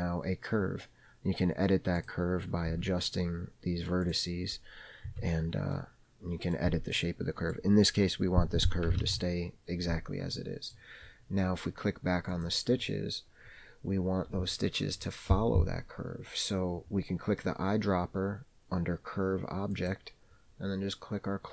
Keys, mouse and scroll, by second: 2.2 click, 2.9 g, 5.3 Tab, 6.0-6.8 middle drag, 7.1 scroll up 1, 7.2-7.8 middle drag, 7.9-9.1 scroll down 2, 9.3 alt+z, 10.6 middle click, 12.5 click, 14.2-16.7 scroll down 3, 20.0 click.